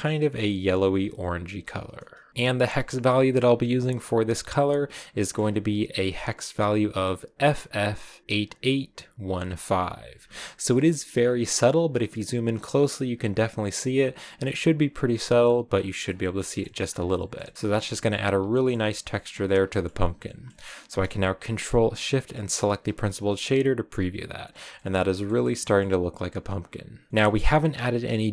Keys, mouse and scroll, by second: 2.3 ctrl+v, 3.4-4.9 drag, 5.4-5.8 scroll up 6, 5.8-7.0 drag, 9.8 scroll down 4, 10.2 shift+middle click, 11.1-11.7 scroll up 5, 15.5-16.2 scroll down 10, 16.2 shift+middle click, 16.7 scroll down 2, 16.9 shift+middle click, 17.8 scroll down 1, 18.4-22.4 shift+middle drag, 22.4 ctrl+shift+click, 24.8-26.0 middle drag, 26.0-28.3 drag.